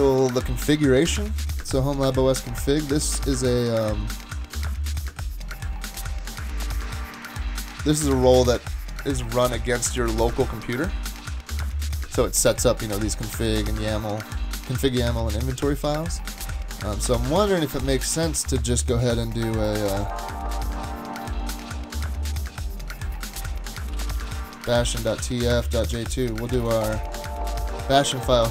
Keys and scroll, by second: 1.3 super+Tab, 23.7-27.1 typing.